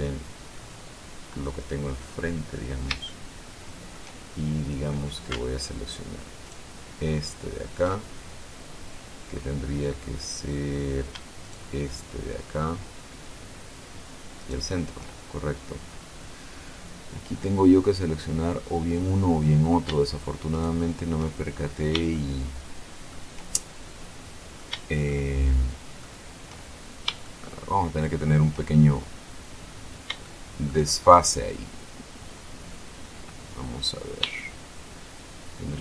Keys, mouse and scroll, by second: 0.1 click, 0.3-2.2 middle drag, 2.2-2.7 scroll up 1, 2.7-3.1 scroll up 1, 3.3-4.3 shift+middle drag, 4.3-4.8 shift+scroll up 1, 6.7 alt+shift+right click, 8.2-8.9 alt+shift+scroll up 4, 11.6 shift+right click, 14.6 shift+right click, 15.5-15.9 shift+scroll down 3, 16.1-16.7 scroll up 2, 20.7 shift+right click, 21.6-22.2 shift+scroll down 1, 22.4-23.5 shift+middle drag, 23.7-24.1 shift+scroll up 1, 24.4-24.7 scroll down 1, 24.7 shift+middle click, 25.3-27.2 shift+middle drag, 27.4-28.6 shift+middle drag, 30.4 shift+middle click, 31.2-32.2 shift+scroll up 1.